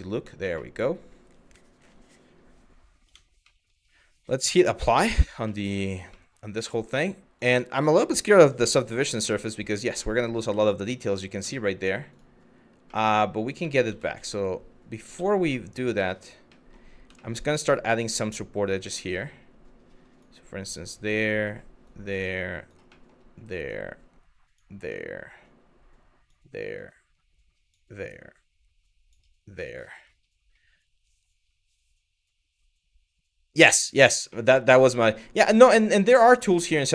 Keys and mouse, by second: 0.3 middle click, 2.7 Tab, 3.1 middle drag, 4.2-4.8 drag, 5.2 middle click, 5.8 middle drag, 6.3 middle drag, 7.0-8.4 drag, 8.9-9.2 middle drag, 9.9 middle click, 10.3 shift+middle click, 10.8 middle drag, 11.2 shift+middle drag, 12.6 middle click, 13.3 ctrl+z, 13.5 ctrl+z, 15.3 middle click, 15.8 middle click, 16.2 middle click, 16.8 middle click, 18.5 click, 20.3 click, 21.5 click, 22.6 middle click, 23.3 click, 24.5 click, 26.4 click, 27.7 click, 29.3 middle click, 33.9 middle click, 35.1 click, 36.2 ctrl+z, 36.7 middle click.